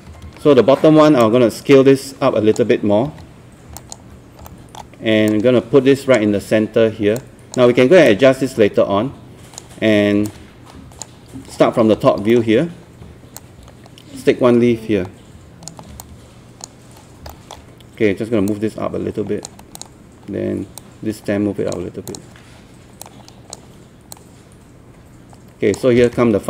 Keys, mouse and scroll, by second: 0.1 alt+e, 0.3 alt+r, 1.2-2.6 drag, 3.1 w, 3.8 alt+click, 4.5 alt+middle click, 5.3-11.3 drag, 11.3 scroll down 1, 11.8-12.2 scroll up 2, 12.3 alt+middle click, 13.4-17.2 drag, 17.3 alt+middle click, 18.5-26.4 drag.